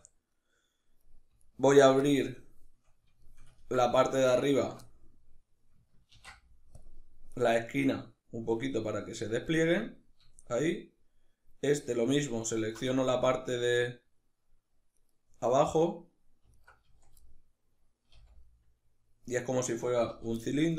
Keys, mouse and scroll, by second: 1.0 alt+right click, 1.7-4.2 middle drag, 4.2 alt+shift+right click, 4.5-12.1 middle drag, 5.8 ctrl+e, 12.1 alt+right click, 12.5-14.6 shift+middle drag, 14.6 right click, 16.2 alt+right click, 16.5 z, 16.9-19.0 middle drag, 17.8 c, 19.0 right click, 19.8 z, 20.0 middle click, 20.6 shift+right click.